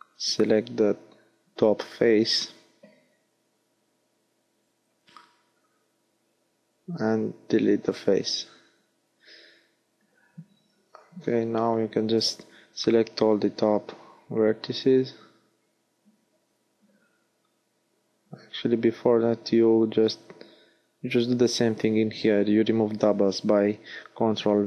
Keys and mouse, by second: 2.2 ctrl+Tab, 4.7 x, 8.3 ctrl+Tab, 15.4 click, 18.8 a, 18.9 a, 19.7 ctrl+v.